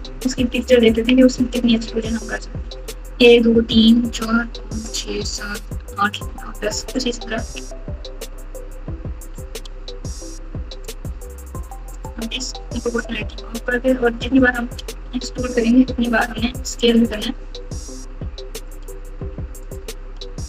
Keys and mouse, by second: 0.0-0.9 typing, 7.4 KP_1, 8.6 e, 9.8 g, 11.1 r, 12.5 o, 13.6 s, 14.8 g, 16.1 e, 17.3 g, 18.8 s, 20.2 r.